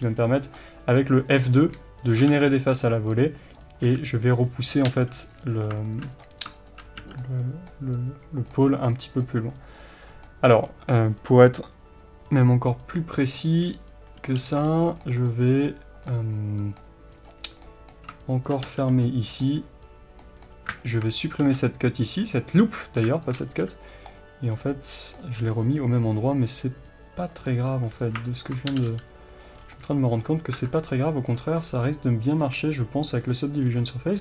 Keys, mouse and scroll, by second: 0.6 middle click, 1.5 click, 2.3 f, 2.8 middle click, 3.5 click, 3.8 f, 4.4 right click, 4.9 g, 5.3 click, 7.0 f, 7.2-9.7 middle drag, 9.7 click, 10.4-14.8 middle drag, 13.5-14.5 scroll down 1, 14.5 g, 14.8 click, 15.0-17.2 middle drag, 17.2 click, 17.7 middle click, 18.4 shift+click, 18.6 f, 19.0-20.9 middle drag, 20.9 alt+click, 22.4 x, 23.2 alt+click, 23.5 f, 24.1 click, 24.5 scroll down 1, 24.6-28.0 middle drag, 25.4-25.7 scroll up 2, 26.4 g, 28.0 click, 28.7 g, 29.4 click, 29.6 scroll down 2, 29.7-33.3 middle drag, 30.5 Tab, 30.7 scroll down 2, 31.6-33.3 scroll up 2, 33.3-33.8 drag, 33.6 scroll down 2, 33.8-34.2 middle drag.